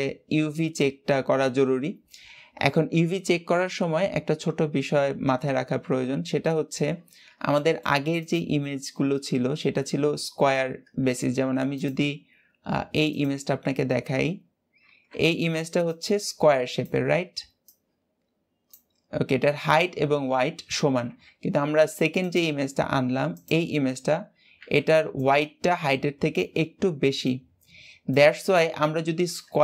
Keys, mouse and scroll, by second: 0.7-1.5 scroll down 2, 4.4 Tab, 6.4 Tab, 7.1-7.4 scroll down 2, 7.4-8.0 shift+middle drag, 8.0 click, 9.4 scroll down 1, 11.6 click, 13.6 scroll down 1, 13.7 scroll up 2, 22.1-23.8 drag, 23.8-24.2 scroll down 3, 24.2-25.2 scroll up 1.